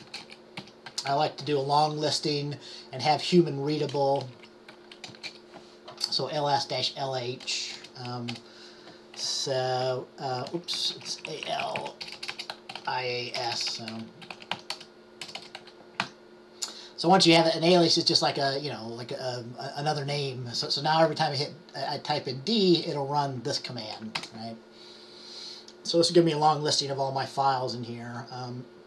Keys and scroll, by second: 0.0-1.7 typing, 2.8-3.6 typing, 4.3 Left, 4.5 Left, 5.0-5.7 typing, 8.4 typing, 11.5-15.2 typing.